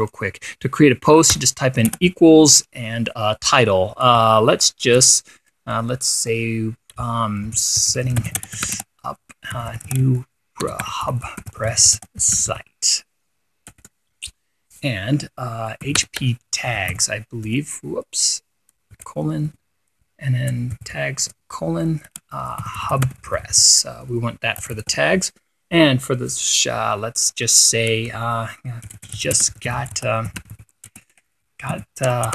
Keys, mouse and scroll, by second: 0.5 click, 1.8 =, 2.4 space, 7.7-13.5 typing, 14.2 Return, 16.1-18.0 typing, 19.4 shift+;, 20.0 shift+1, 21.2-25.4 typing, 25.1 Return, 29.1-32.3 typing.